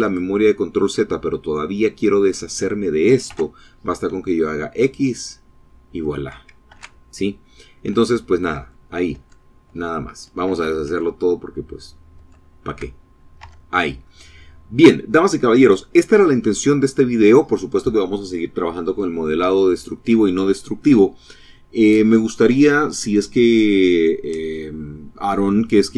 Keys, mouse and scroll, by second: 1.2 scroll up 1, 2.4 x, 4.0 click, 5.9 ctrl+z, 7.1 ctrl+<, 7.7 ctrl+z, 11.3 ctrl+z, 12.4 scroll down 2, 12.6 Tab, 13.2 click, 14.1-16.9 middle drag.